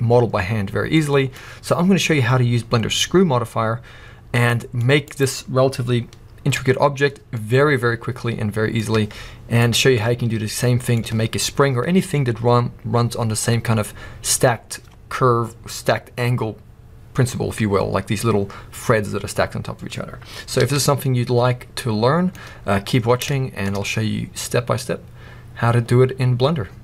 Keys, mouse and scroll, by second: 2.5 scroll up 1, 4.5 middle click, 5.2 click, 6.6 Tab, 7.3 middle click, 8.9 Tab, 9.7 click, 10.4-26.8 middle drag, 20.6 alt+a.